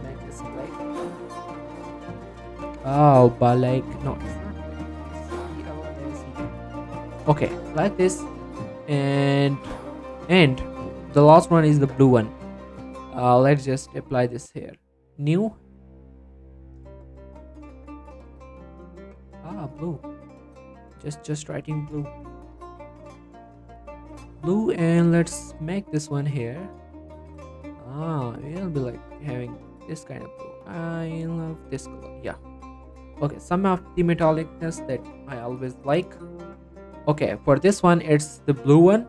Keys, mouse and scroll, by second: 0.4-1.4 typing, 1.9 Return, 3.8 click, 5.2-6.2 typing, 6.5 Return, 8.1-8.5 scroll down 1, 8.5 middle click, 8.7 scroll up 1, 9.4 middle click, 9.9 e, 10.6 click, 12.9 click, 16.7-17.6 typing, 18.1 Return, 19.4 click, 22.5-23.2 typing, 23.4 Return, 24.8-32.1 drag, 32.1 click, 34.1 click, 34.6 scroll up 1, 34.7 click, 35.1 middle click, 35.4 scroll down 1, 35.5 middle click, 36.1-36.7 scroll up 1, 36.7 click.